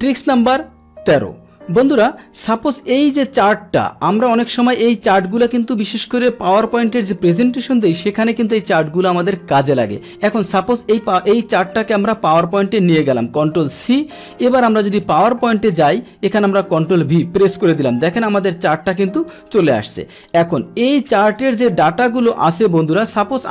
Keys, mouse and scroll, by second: 2.4-3.8 drag, 10.8-12.3 drag, 13.7 ctrl+c, 14.7 Tab, 15.7 click, 16.3 click, 16.7 ctrl+v, 19.0 click, 19.7 click, 20.8 click, 22.4 ctrl+z, 23.1 click.